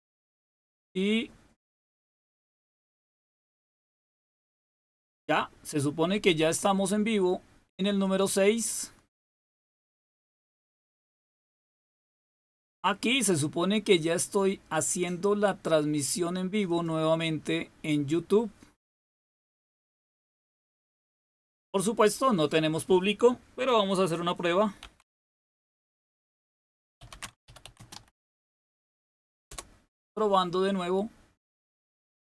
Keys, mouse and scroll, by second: 7.9 click, 14.7 click, 16.6 click, 22.0 click, 22.4 click, 24.5-29.0 typing, 29.4 Return, 30.5 typing.